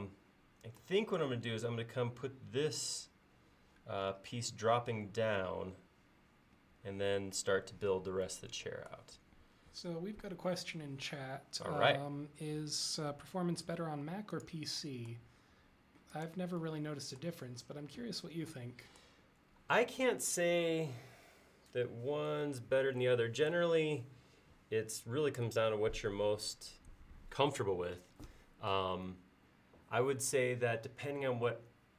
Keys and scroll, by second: 9.6 l, 15.5 l.